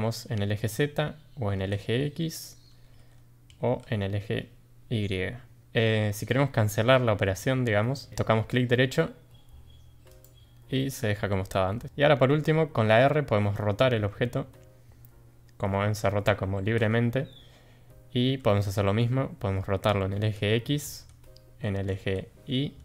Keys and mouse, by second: 13.8 r.